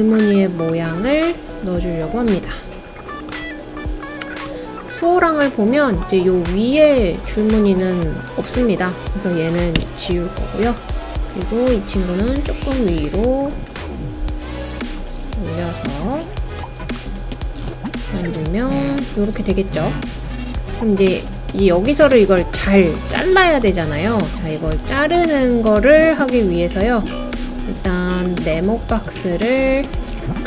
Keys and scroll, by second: 9.8 BackSpace.